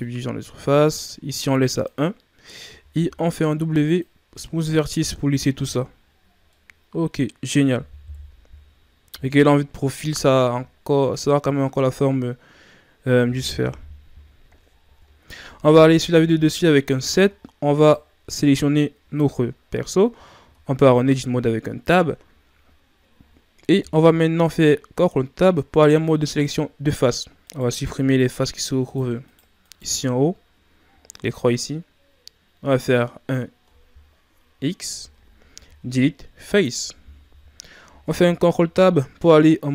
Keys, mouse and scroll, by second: 0.0-2.9 drag, 2.9 w, 5.1-5.5 ctrl+scroll down 2, 5.5 a, 5.8-6.5 scroll down 1, 6.5-8.1 middle drag, 8.1 KP_3, 13.7 KP_1, 14.7-15.1 shift+scroll up 5, 16.0 KP_7, 17.2 scroll up 2, 17.8 right click, 20.4 Tab, 23.9 ctrl+Tab, 27.4 right click, 28.1 shift+right click, 28.4 shift+right click, 28.8 shift+right click, 29.2 shift+right click, 29.6 shift+right click, 38.0 ctrl+Tab.